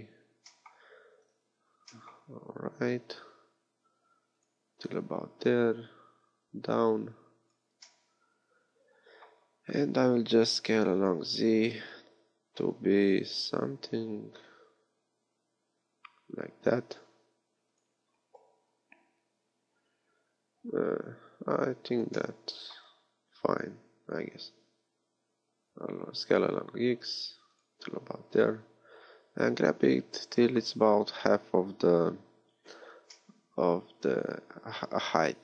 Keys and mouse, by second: 1.5 g, 5.0-10.7 drag, 10.7 s, 22.3-24.3 middle drag, 24.3 s, 29.0-32.7 middle drag, 33.1-35.4 middle drag.